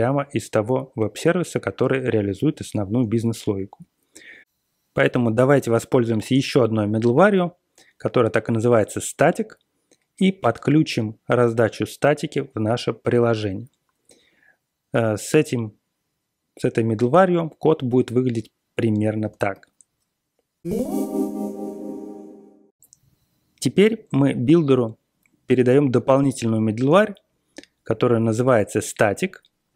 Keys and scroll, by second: 19.2 ctrl+x, 19.5 b.